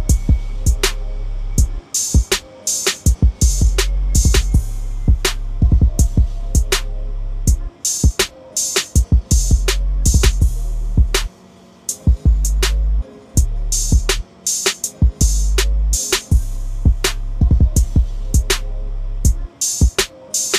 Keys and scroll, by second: 3.0 ctrl+l.